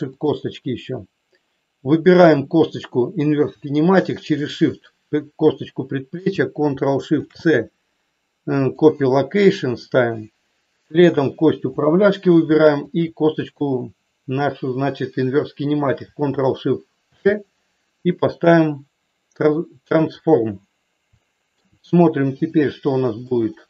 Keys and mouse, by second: 0.2 click, 2.1 click, 21.2 shift+middle click, 22.3 click, 23.2 middle click.